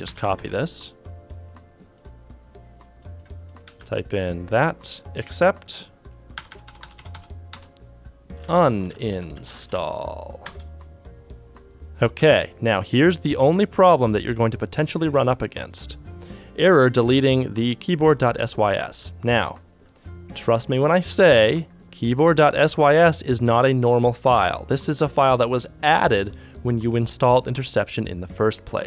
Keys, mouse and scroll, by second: 3.3 c.